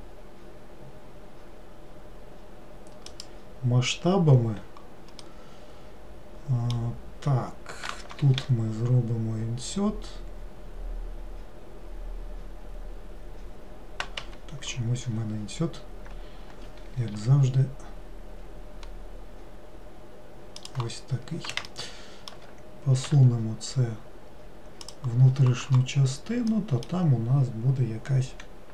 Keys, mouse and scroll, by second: 5.3-8.5 middle drag, 15.1-17.2 scroll up 2, 21.8-23.2 shift+middle drag, 23.2 e, 26.7-28.7 middle drag.